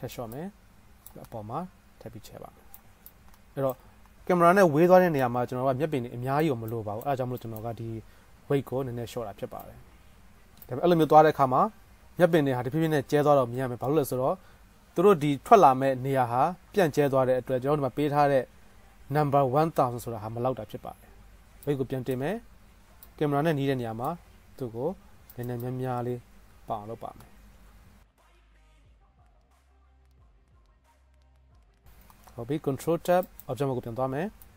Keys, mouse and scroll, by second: 0.4 click, 0.5-3.1 middle drag, 3.4 middle click, 3.5-6.1 drag, 6.1-10.6 middle drag, 11.3 middle click, 12.7-16.1 drag, 23.1 click, 24.0 middle click, 24.3 click, 24.4 middle click, 24.6-31.7 drag, 25.0 f, 27.3-29.5 middle drag, 27.3-29.5 right drag, 32.1 ctrl+Tab, 33.6-34.5 middle drag.